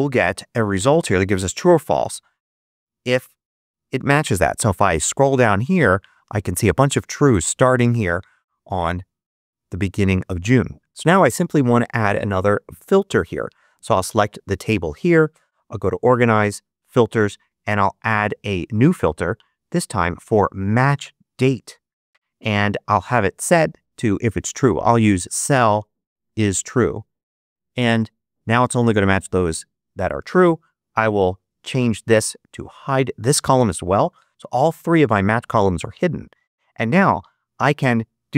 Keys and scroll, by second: 1.9 super+c, 3.1 super+v.